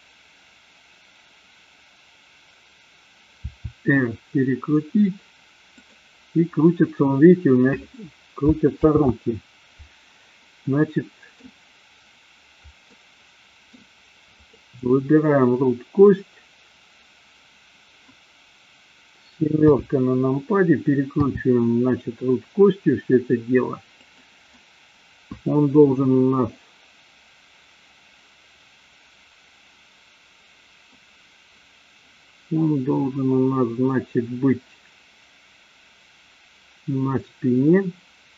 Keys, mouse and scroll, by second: 3.4 r, 5.9 click, 9.2 ctrl+z, 10.7-11.5 middle drag, 12.9-13.7 middle drag, 14.5 click, 19.6 KP_7, 21.0 r, 24.5-30.9 middle drag.